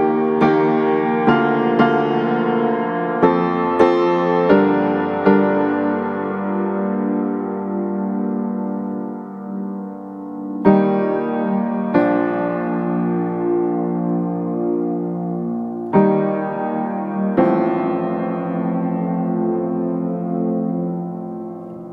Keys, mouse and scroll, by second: 1.2 click, 1.5 right click, 2.1 scroll down 1, 2.2 scroll up 1, 2.3 right click, 2.8 click, 3.3-3.8 scroll up 2, 3.4 right click, 3.8 click, 4.7 scroll down 1, 4.8 scroll up 1, 5.0 click, 5.2 scroll down 1, 5.3 scroll up 1, 5.4 right click, 6.0 click, 6.5 right click, 7.0-8.2 drag, 10.9 scroll up 1, 11.0 right click, 11.3 click, 11.9 right click, 12.2-12.6 scroll up 1, 12.6 click, 12.9 scroll down 1, 13.0 scroll up 1, 13.2 click, 13.8 right click, 14.1 click, 14.6 scroll down 1, 14.7 scroll up 1, 14.8 click, 20.3 right click, 20.6-21.9 drag.